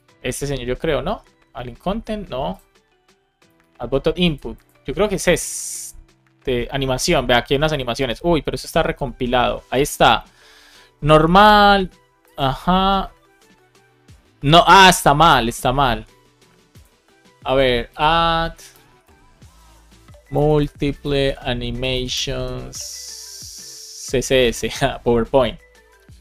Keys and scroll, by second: 18.7 space, 21.0 space, 23.8 space, 24.4 Return.